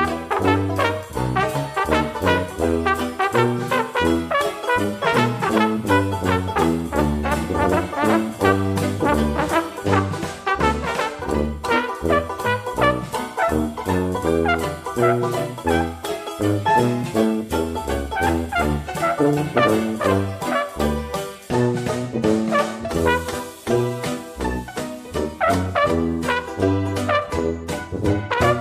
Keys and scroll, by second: 18.2 ctrl+d, 24.7 ctrl+d.